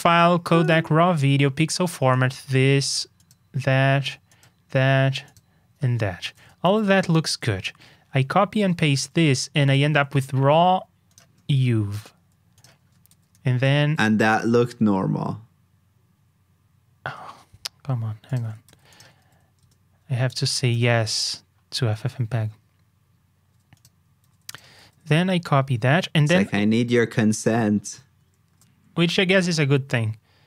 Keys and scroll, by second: 6.6 super+c, 6.8 super+j, 13.0 super+c, 13.5 super+j, 18.6 super+c, 19.2 super+v, 24.2 super+c, 24.8 super+v, 28.4 super+j.